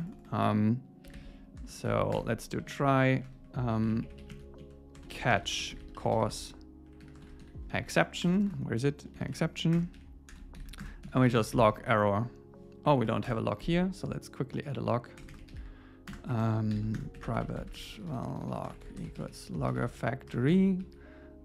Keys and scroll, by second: 1.9 alt+8, 2.2 Return, 2.5 Down, 2.9 super+Right, 3.1 shift+super+Left, 3.7 super+x, 3.9 Up, 4.2 super+Right, 4.3 super+v, 4.6 Down, 9.8 Return, 10.0 Right, 10.6 alt+8, 10.8 Return, 13.0 shift+super+Left, 15.2 Return, 16.7 alt+8, 17.0 Return, 20.3 Return.